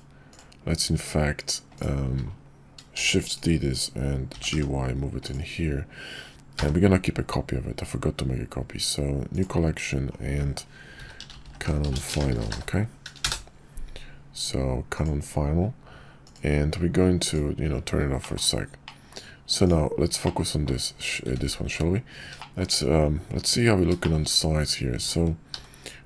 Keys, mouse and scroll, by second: 3.0 shift+d, 4.3 g, 6.5 m, 11.4 n, 18.2 middle click, 18.8 middle drag, 20.2 middle click, 21.2 `, 22.3 shift+drag, 24.0 shift+click, 24.9 s.